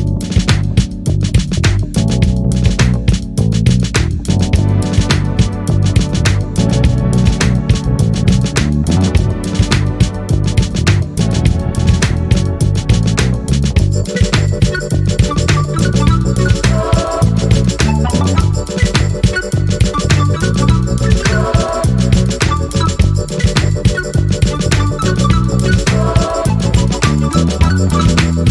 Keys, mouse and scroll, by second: 1.2 shift+click, 2.7 ctrl+shift+KP_Add, 4.7 click, 5.7-6.8 drag, 7.7 click, 9.2-10.2 drag, 11.6 click, 13.6 click, 15.1 Down, 18.8 click, 19.8 KP_5, 21.2-21.5 ctrl+scroll up 2, 21.8 ctrl+click, 23.2-24.2 ctrl+shift+drag, 26.1 ctrl+shift+k, 27.4 click, 28.1-28.5 drag.